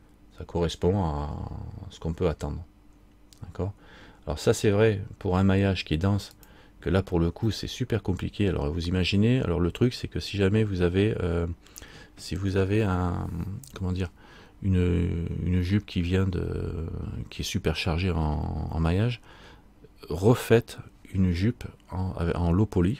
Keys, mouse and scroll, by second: 7.7 middle click, 8.9-10.7 scroll down 1.